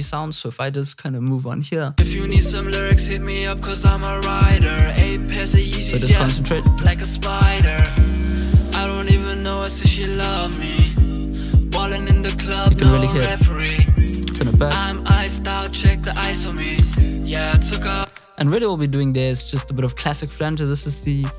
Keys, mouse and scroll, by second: 3.0-3.9 drag, 3.9 click.